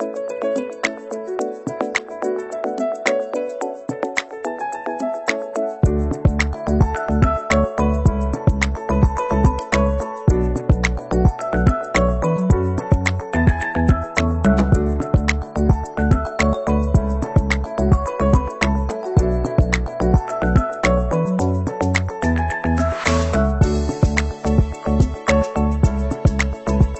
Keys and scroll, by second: 13.7 ctrl+=, 15.0 Left.